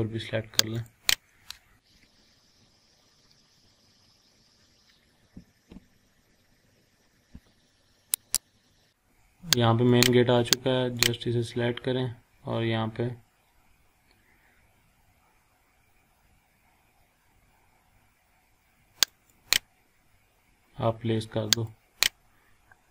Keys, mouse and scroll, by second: 8.3 click, 9.9 click, 19.0 click, 22.4 scroll up 1.